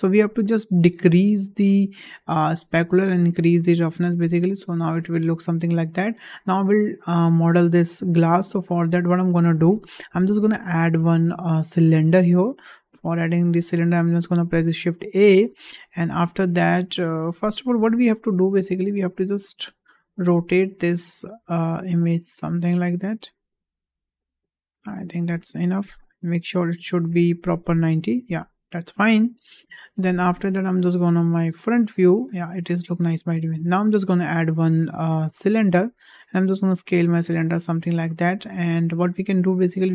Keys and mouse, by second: 2.4-2.9 drag, 3.5-4.0 drag, 5.4-6.1 shift+middle drag, 11.0 shift+a, 16.7-17.4 middle drag, 18.4 Delete, 19.0 click, 19.4 middle click, 20.1 click, 21.5-25.0 drag, 26.2 click, 31.1 `, 32.6 shift+middle drag, 33.4 shift+middle drag, 33.9 shift+a, 35.8 s, 38.1 shift+middle drag, 38.7 shift+middle click, 39.8 click.